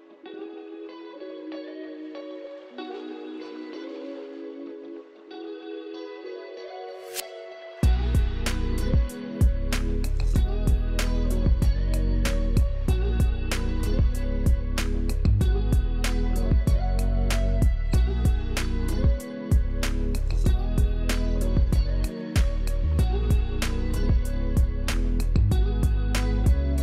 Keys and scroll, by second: 3.8 alt+z, 10.2 space, 14.1 space, 18.7 space, 20.0 alt+space, 21.1 space, 26.3 space.